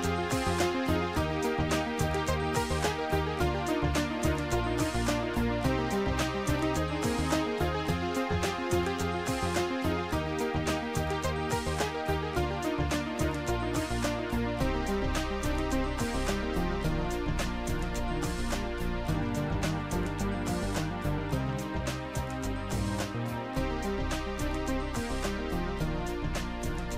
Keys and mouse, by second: 1.0 Return, 1.0 shift+click, 3.5 Return, 4.9 click, 7.4 click, 8.6 click, 9.6 click, 11.0 click, 11.7 click, 15.7 shift+click, 19.8 click, 21.0 click, 24.8 click, 26.0 click.